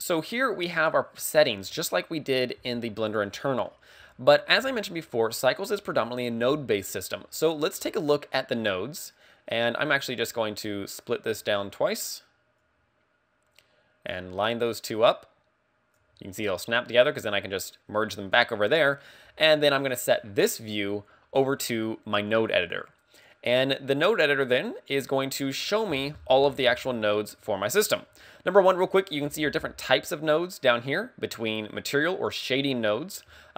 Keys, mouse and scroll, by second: 9.2 click, 12.6 click, 19.2 click, 20.0 click, 24.5 click, 25.6-27.2 scroll up 17, 27.2 middle click.